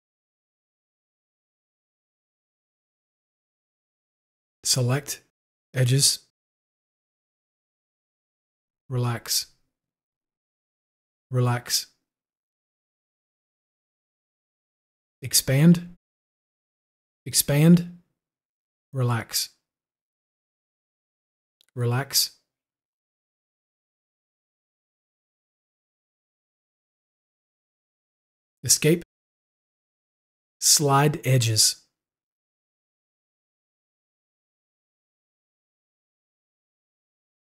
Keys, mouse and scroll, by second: 0.4 click, 2.5 click, 5.5 Escape, 5.6-6.9 drag, 10.2 click, 10.4 u, 12.6 u, 16.5 u, 18.5 u, 20.3 u, 29.6 u, 32.4 u, 36.3-37.5 ctrl+drag.